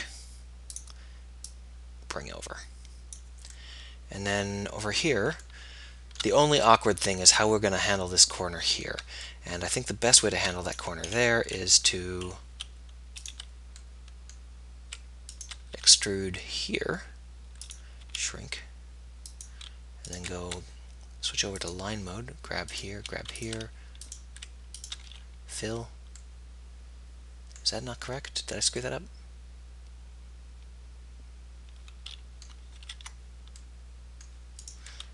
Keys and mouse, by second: 4.8-6.4 middle drag, 7.3-8.4 middle drag, 10.1-11.1 middle drag, 11.3-13.7 middle drag, 14.1 right click, 15.8 e, 18.2 s, 25.6 f, 26.7 middle click, 31.2 middle click, 32.9 ctrl+z.